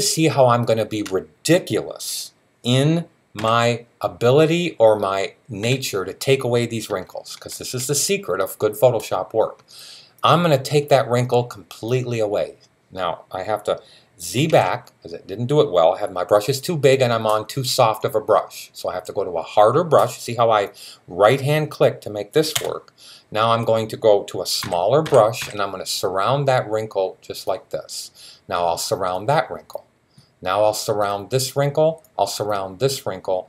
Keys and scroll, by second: 0.9 typing, 2.6-3.3 typing, 14.3 super+z, 24.5 [, 24.8 [, 25.2 [, 27.3 typing.